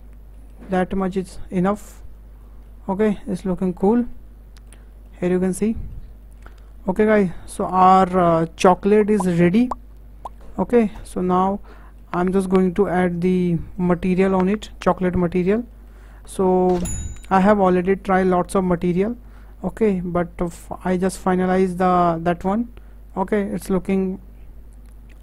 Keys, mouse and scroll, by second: 0.3-0.7 middle drag, 0.7 scroll up 1, 1.0-2.0 shift+middle drag, 2.0 click, 2.2-2.7 scroll up 5, 2.7-3.4 middle drag, 3.4-4.1 scroll down 10, 4.1-6.6 middle drag, 6.6-7.0 scroll up 5, 7.0 shift+middle click, 7.4-7.7 scroll down 5, 7.7-8.8 middle drag, 8.8 scroll down 4, 9.1-11.2 shift+middle drag, 11.2-11.7 scroll up 5, 11.7-13.8 shift+middle drag, 13.8 click, 14.6-17.2 shift+middle drag, 17.2 click, 18.1-21.1 drag.